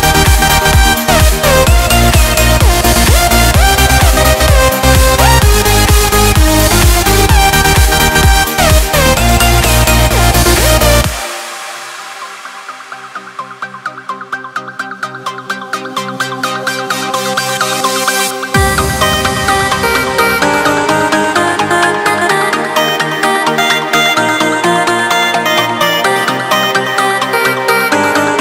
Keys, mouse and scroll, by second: 1.0 Return, 5.8 click, 7.0 click, 9.3 2, 9.9 0, 10.5 Return, 11.7 Escape, 12.7-13.0 scroll down 1, 13.0-13.4 scroll up 1, 13.9 ctrl+middle click, 17.0 click, 18.7 click, 21.7 click, 23.9 click, 24.9 right click, 27.5 click.